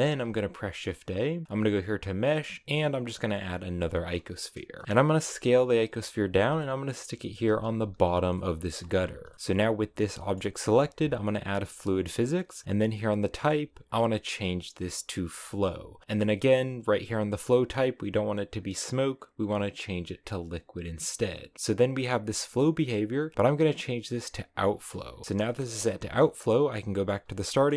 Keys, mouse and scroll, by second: 0.2 shift+a, 4.0-4.4 scroll down 4, 4.4-4.8 scroll up 2, 4.8 s, 6.5 middle click, 6.9 g, 7.4 s, 7.7 g, 8.2 middle click, 8.8 s, 9.2 scroll up 1, 9.4 g, 10.1-11.5 middle drag, 11.5-16.0 drag, 17.4-20.4 drag, 23.3-24.8 drag, 24.8-25.2 scroll down 3, 25.2-26.5 shift+middle drag, 26.5 click, 27.4 middle click.